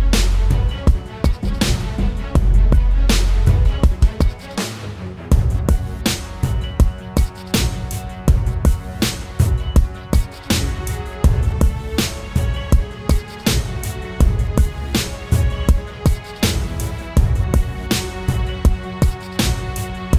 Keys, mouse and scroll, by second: 10.4 double click.